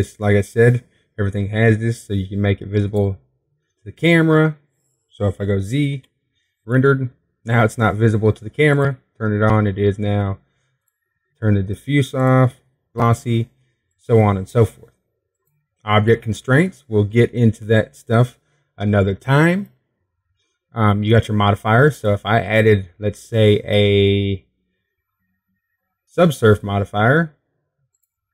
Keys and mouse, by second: 7.6 z, 10.6 click, 11.2-28.3 drag.